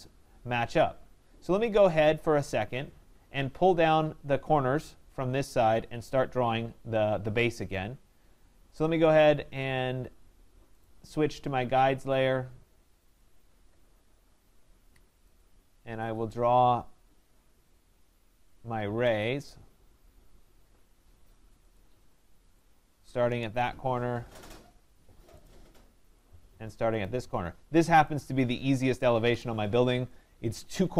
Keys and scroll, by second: 23.3 Return, 28.8 Return.